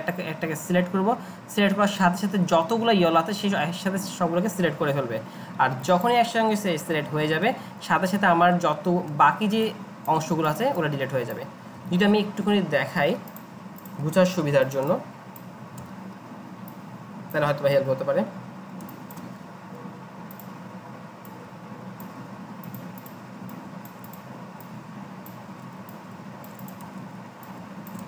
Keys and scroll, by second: 6.8 ctrl+z, 7.0 ctrl+z, 9.9 ctrl+z, 11.8 Delete, 12.9 ctrl+z, 14.4 ctrl+shift+g, 15.8 Delete, 17.7 Delete, 26.8 ctrl+z.